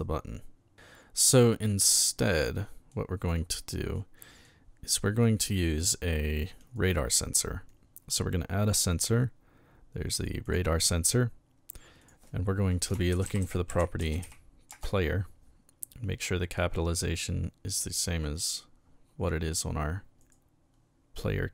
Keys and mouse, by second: 0.7-1.8 shift+middle drag, 2.3-2.9 middle drag, 3.9 middle click, 6.6 click, 10.4 click, 12.0 click, 12.9-14.7 typing, 18.2 click, 20.2 right click.